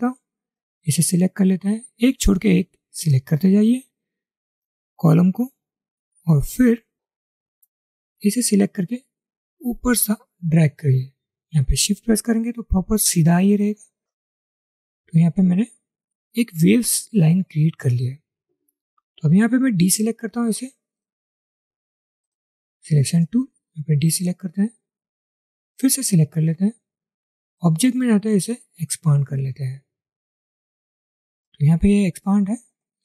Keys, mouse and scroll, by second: 1.6 shift+click, 3.7 shift+click, 6.8 shift+click, 24.2 double click.